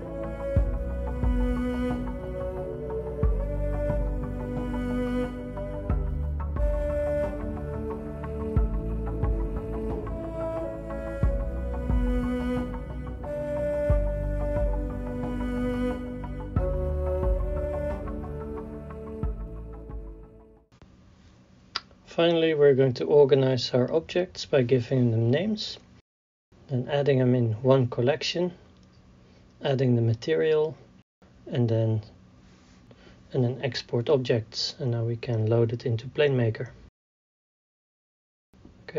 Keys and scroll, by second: 0.3 s, 0.4 y, 2.2-8.2 typing, 4.0 Tab, 4.8 Tab, 8.0 Tab, 9.3 ctrl+p, 10.0 ctrl+p, 10.7 ctrl+z, 20.8-26.3 typing, 21.2 Return, 21.7 Return, 22.4 Return, 23.2 Return, 23.8 Return, 24.8 Return, 25.5 Return, 26.3 Return, 29.1 shift+e, 29.2 n, 29.2 Return, 34.9 ctrl+c, 35.3 BackSpace, 35.5 n, 35.5 i, 35.5 e, 35.6 Return.